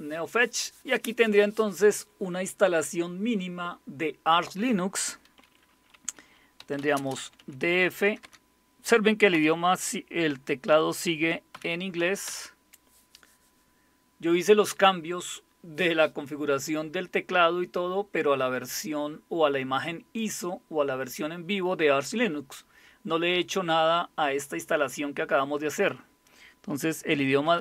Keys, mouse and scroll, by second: 6.3-8.2 typing, 9.3 typing, 11.5-12.2 typing, 27.4 typing.